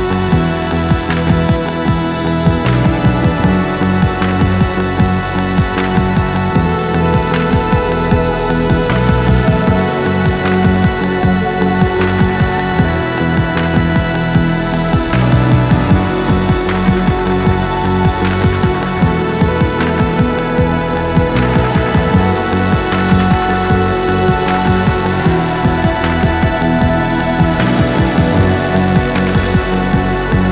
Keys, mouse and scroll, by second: 5.3-6.9 drag, 7.2 middle click, 7.2 scroll up 1, 7.4 middle click, 7.8 alt+click, 8.2 click, 9.1-12.8 shift+right drag, 9.9-10.3 scroll up 5, 10.4 alt+middle click, 11.0 alt+click, 11.4 click, 13.1-13.5 scroll down 3, 13.5 alt+middle click, 15.7 alt+click, 15.9 alt+double click, 16.3-18.3 typing, 20.3 Return, 21.0 scroll down 2, 21.4 alt+middle click, 22.1 alt+middle click, 22.5-23.4 scroll down 4, 23.4 scroll up 1, 23.6 alt+middle click, 24.2 scroll down 2, 24.5 alt+middle click, 26.8 click, 30.3-30.5 scroll up 3.